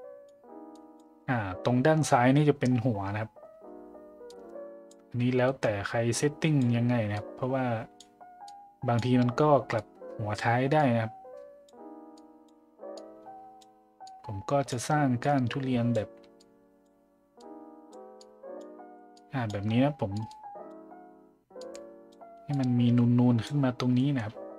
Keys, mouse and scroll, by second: 0.7 click, 4.3 click, 5.5-6.6 drag, 7.2 click, 8.5 click, 9.8 click, 10.8 click, 12.1 click, 12.9 click, 14.1 click, 15.3 click, 16.4 click, 17.4 click, 18.2 click, 19.2 click, 20.2 click, 20.3-20.7 drag, 21.6 click, 22.6 click, 24.0 middle click.